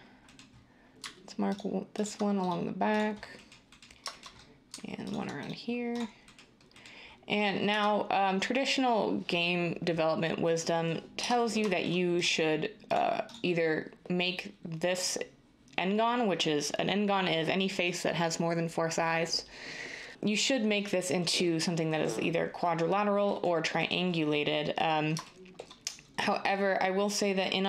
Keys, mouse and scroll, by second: 7.6 Tab, 11.1 Tab.